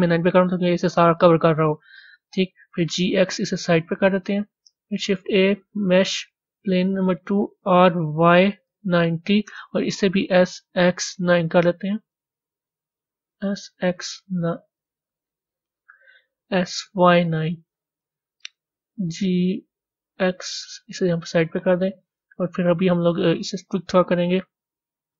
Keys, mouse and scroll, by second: 0.3-2.5 middle drag, 2.5 g, 21.5 middle click, 22.5-23.2 scroll down 3, 23.2 click.